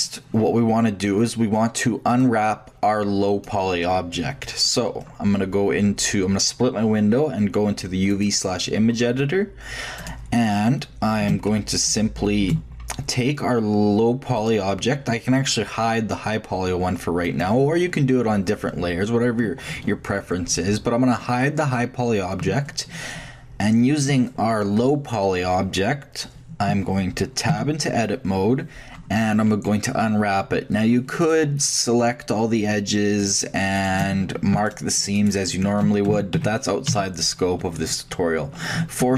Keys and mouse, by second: 2.2-6.6 drag, 9.9 middle click, 10.0-12.1 drag, 14.3-16.2 shift+drag, 16.2 middle click, 17.2-19.2 drag, 23.2-27.5 middle drag, 27.5 Tab, 31.2-34.0 drag, 36.1 shift+a, 36.3 shift+a, 36.9 shift+a, 38.7 a, 39.0 u.